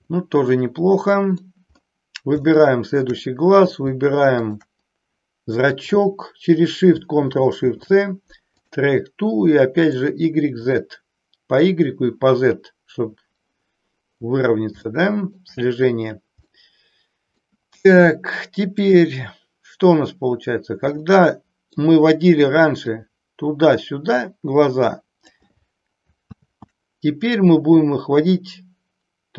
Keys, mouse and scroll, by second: 0.2-1.4 middle drag, 2.5-3.2 shift+middle drag, 7.5 ctrl+shift+c, 9.8 click, 10.7 click, 14.9 shift+middle click, 16.4-17.4 middle drag, 18.7-20.3 drag, 20.9 middle click, 22.9-25.3 drag, 26.3 ctrl+z, 28.3-29.3 drag.